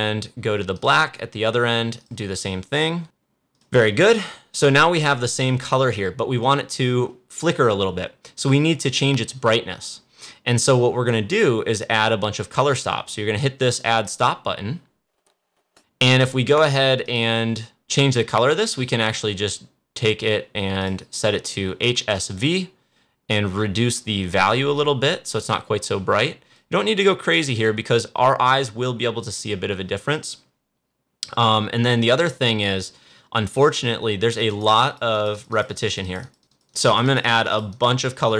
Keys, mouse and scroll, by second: 0.7 click, 3.5 click, 14.0 click, 20.7 click, 22.9 click, 24.7-27.4 drag, 34.2 click.